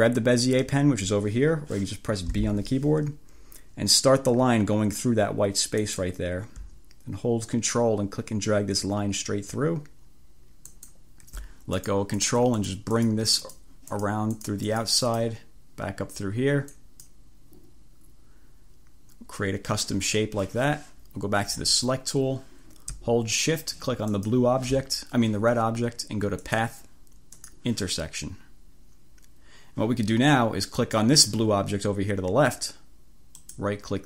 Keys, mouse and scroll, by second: 2.4 b, 5.8 click, 10.7 click, 11.9 click, 12.3 click, 12.7 click, 13.1 click, 13.6 click, 14.0 click, 14.5 click, 15.2 click, 16.8 click, 21.7 click, 24.2 shift+click, 26.5 click, 27.4 click, 30.9 click, 33.5 right click.